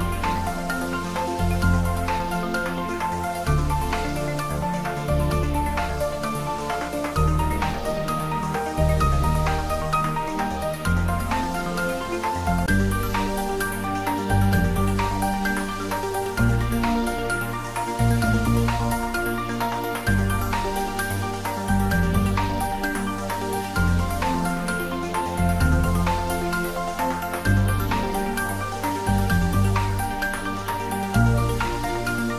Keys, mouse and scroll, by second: 0.8 ctrl+j, 3.8 click, 4.6-5.4 scroll up 1, 5.4-5.7 scroll down 1, 5.7-8.2 middle drag, 8.2 Tab, 10.0 ctrl+r, 15.7 click, 24.4 click, 24.8 middle click, 26.1-26.5 scroll up 1, 26.5 middle click, 27.0 scroll down 1, 27.4 middle click, 28.4 ctrl+r, 29.7 click.